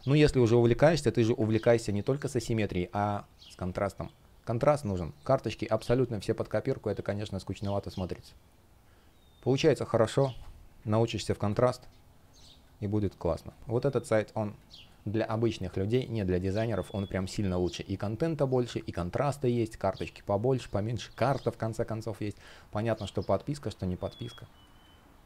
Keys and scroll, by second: 2.2 space, 5.4 shift+p, 5.7 space, 10.6 super+\, 11.1 space, 20.4 space, 22.6 space.